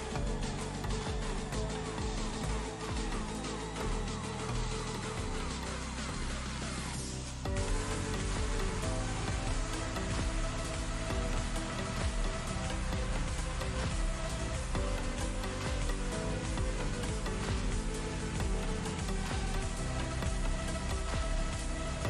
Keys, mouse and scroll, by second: 2.8-3.1 drag, 6.7 ctrl+space, 6.8 ctrl+click, 7.0-7.8 ctrl+space, 8.5 ctrl+space, 8.6 ctrl+click, 8.7-9.5 ctrl+space, 9.6-10.2 click, 10.7 ctrl+g, 11.3 click, 12.8-13.5 ctrl+click, 13.0 ctrl+space, 13.5 ctrl+space, 13.6 click, 14.6-15.1 alt+click, 16.2-17.5 alt+drag, 17.7 space, 17.8 click, 17.9-18.2 space, 19.4 click, 20.6 click.